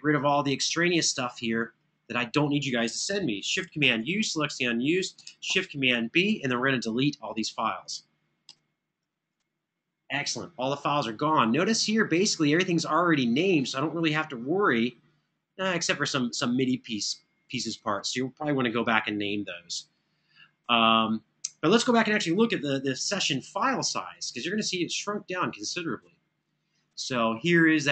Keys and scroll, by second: 3.6 ctrl+super+u, 5.2 ctrl+super+b.